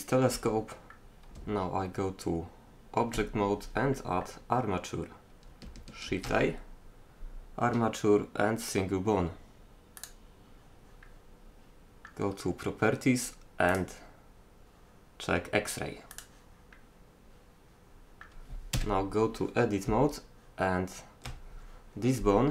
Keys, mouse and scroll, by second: 0.3-1.4 middle drag, 1.4 Tab, 6.1 shift+a, 11.1 middle click, 13.7-15.3 drag, 15.6 middle click, 16.8-18.8 middle drag, 18.8 KP_3, 19.9 Tab.